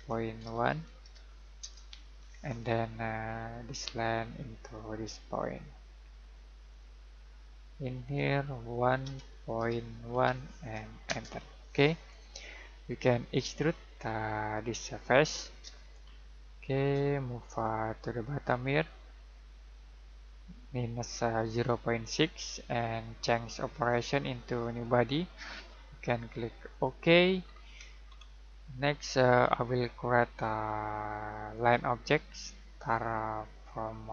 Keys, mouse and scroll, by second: 1.6 Return, 2.2 scroll down 1, 2.4 scroll up 1, 3.6 click, 6.7 click, 9.0 1, 11.0 Return, 13.3 click, 15.9 middle click, 17.1 middle click, 18.4 click, 23.7 click, 27.4 scroll down 1, 27.6-28.7 scroll up 1, 28.7 middle click, 31.5 click.